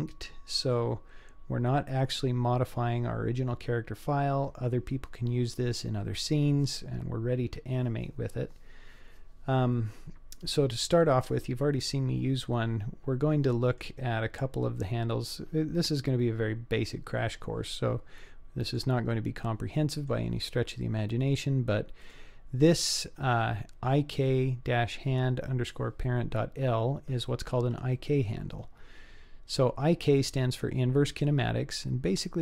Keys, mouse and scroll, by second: 0.4-1.3 scroll up 2, 1.3-2.1 scroll down 1, 10.6-11.8 scroll down 1, 11.8-12.4 scroll up 3, 12.4-13.8 middle drag, 15.6-16.0 scroll down 2, 16.2 scroll up 2, 17.1-18.1 scroll down 1, 18.7 click, 19.4-20.1 middle drag, 22.0 click, 28.0-29.6 middle drag.